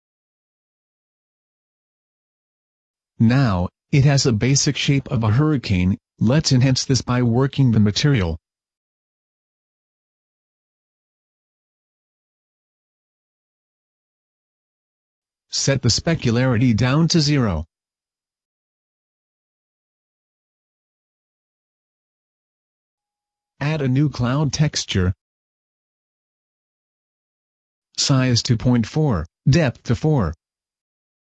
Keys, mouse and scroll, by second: 0.4 right click, 0.5 g, 1.4 click, 8.2 Escape, 8.9 g, 9.6 click, 9.8 g, 10.5 click, 10.5 r, 10.9 click, 11.0 g, 11.2 click, 12.3 right click, 15.5 click, 23.3 click, 23.3-29.0 scroll up 7, 29.0 click, 30.3 click, 30.5 click.